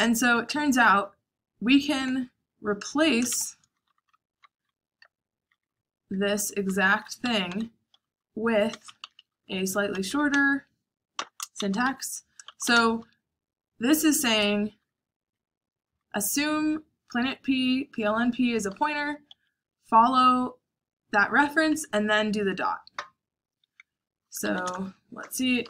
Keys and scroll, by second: 0.0-0.6 typing, 3.2-16.1 typing, 18.4-22.1 typing, 23.9-25.6 typing.